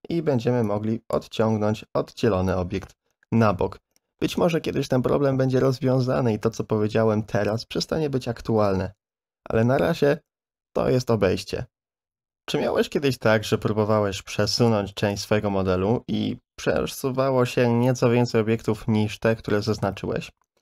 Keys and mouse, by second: 0.7 click, 1.4 middle click, 15.1-18.6 drag, 20.1 ctrl+z.